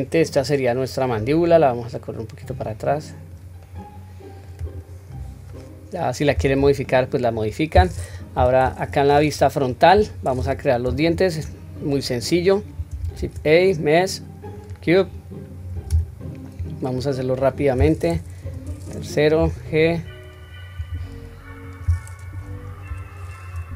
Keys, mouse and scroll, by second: 1.5 click, 3.6-4.6 middle drag, 4.6 click, 5.2-5.8 scroll up 1, 5.9 scroll down 1, 6.9-7.3 shift+middle drag, 8.4 KP_1, 11.0-11.4 shift+middle drag, 11.7-12.9 scroll up 1, 13.5 shift+a, 15.1-15.9 scroll down 1, 15.9-16.3 scroll down 2, 15.9 s, 18.4 KP_3, 19.4 g, 20.9 s, 22.2 KP_2, 22.9 KP_1, 23.5-23.7 scroll up 1.